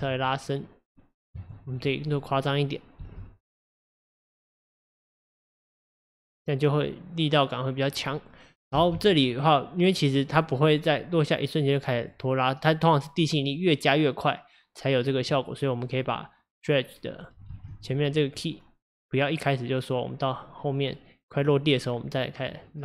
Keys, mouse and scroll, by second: 3.0 space, 8.9 space, 10.2-17.6 drag, 17.6 ctrl+z, 17.8-22.8 drag.